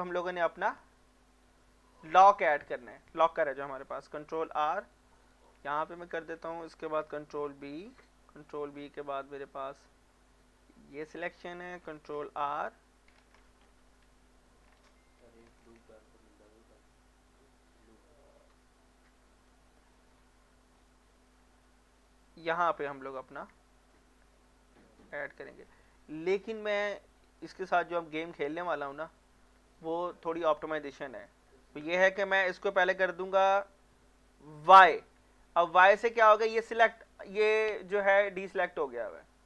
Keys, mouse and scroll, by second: 0.2 scroll up 1, 1.1 middle click, 1.5 shift+middle click, 3.1 middle click, 4.2 ctrl+r, 4.8 click, 5.3 right click, 5.7 middle click, 6.1 shift+middle click, 7.1 ctrl+b, 8.4 scroll down 2, 10.9 click, 11.4 middle click, 12.1 ctrl+r, 12.5 click, 12.6 click, 13.2 ctrl+z, 13.6 Escape, 14.8 ctrl+z, 15.7 ctrl+r, 16.3 click, 19.3 click, 19.8 middle click, 20.1 scroll up 1, 20.8 scroll down 1, 21.2 middle click, 21.5 shift+middle click, 22.0 scroll up 1, 22.9 middle click, 23.2-23.5 scroll up 1, 23.6 shift+middle click, 24.0 scroll up 1, 24.2 Tab, 25.1 click, 25.5 scroll down 1, 25.7 middle click, 25.9 scroll up 1, 26.3 shift+middle click, 26.8 scroll up 1, 27.2 middle click, 31.5 shift+middle click, 34.7 y, 35.8 middle click, 36.7-39.4 drag.